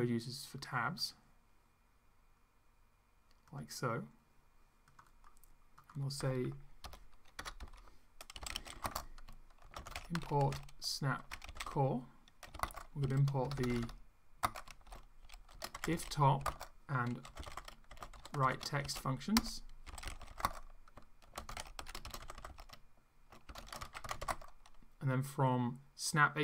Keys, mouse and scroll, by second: 1.0 click, 3.5 click, 4.9 click, 5.7 click, 6.8 Return, 7.4-24.8 typing, 7.6 Up, 19.3 Return.